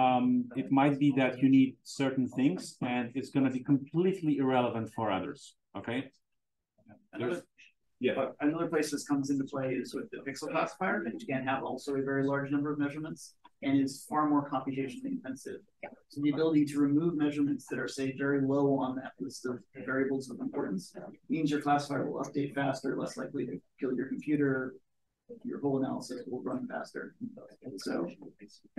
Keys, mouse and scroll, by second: 22.0 click.